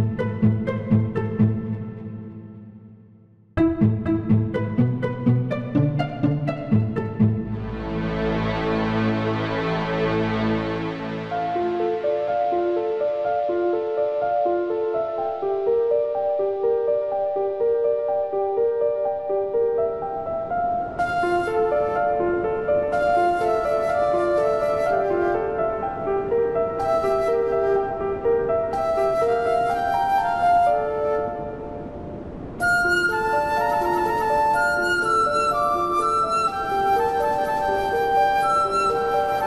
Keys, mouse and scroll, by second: 0.4 click, 0.7 click, 1.8 KP_Subtract, 2.2 KP_Subtract, 7.1 click, 7.9 click, 8.8 click, 10.8 click, 13.0 click, 13.8 KP_Subtract, 13.9 KP_Subtract, 14.2 KP_Add, 14.4 KP_Add, 15.3 click, 15.7 click, 18.5 click, 21.2 click, 24.0 click, 25.0 click, 27.7 click, 29.0 click.